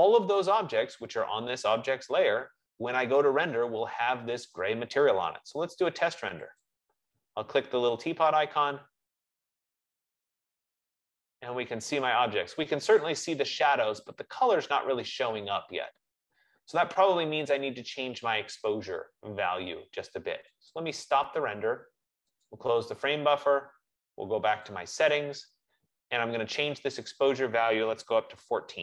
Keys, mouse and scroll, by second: 8.0 F15, 8.0-12.1 drag, 20.9 click, 22.8 click, 25.0 click, 27.4 click, 28.4 BackSpace, 28.5 BackSpace.